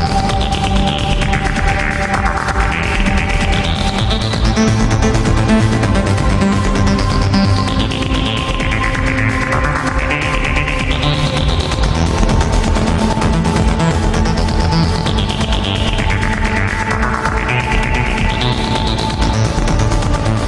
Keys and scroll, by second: 1.3 alt+space, 2.0 alt+space, 2.4 alt+space, 3.4 alt+space, 4.0 alt+space, 4.7 alt+space, 5.1 alt+space, 10.7 ctrl+z, 11.6 ctrl+z, 12.5 alt+space, 18.1 alt+space, 19.2 alt+space.